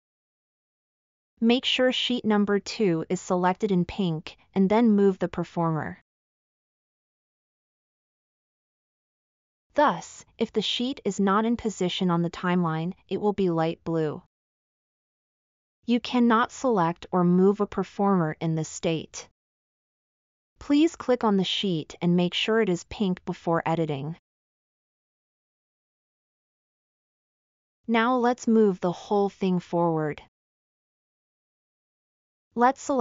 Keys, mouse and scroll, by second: 31.0-31.7 scroll up 6.